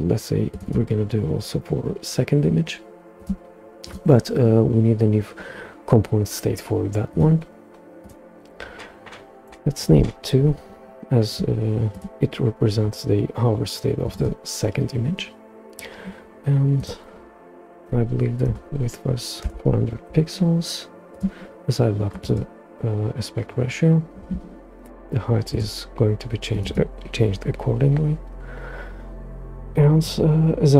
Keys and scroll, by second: 9.4 2, 9.8 Return, 17.8-18.5 typing, 19.4 Return.